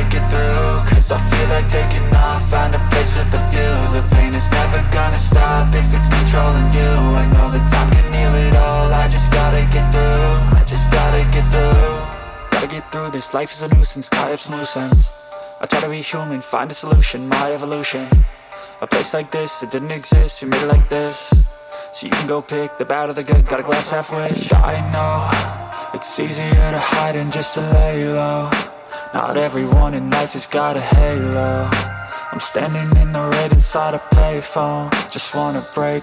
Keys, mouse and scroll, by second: 2.7 ctrl+space, 3.0 ctrl+click, 3.2 ctrl+space, 24.2 double click, 26.2-26.9 typing, 28.4 typing, 30.1-31.4 typing, 32.8-33.7 typing, 34.8 typing, 35.8-36.0 typing.